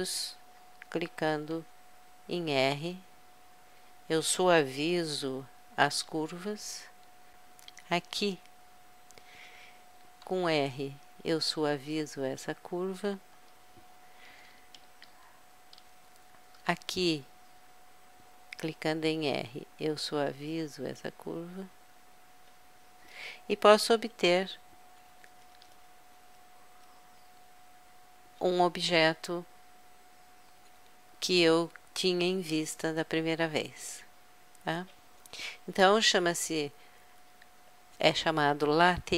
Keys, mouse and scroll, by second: 1.3 click, 1.6 r, 3.8-5.6 drag, 6.4-8.1 drag, 8.1 right click, 10.3 r, 13.1-16.3 drag, 16.3-17.8 middle drag, 17.8-19.2 right drag, 19.2 click, 19.2 r, 22.4-24.2 drag, 24.0 KP_Add, 25.1 KP_Subtract, 25.4 KP_Subtract, 25.9 KP_Subtract, 26.2 KP_Subtract, 26.9 KP_Subtract, 36.9 middle click, 37.7-39.1 drag.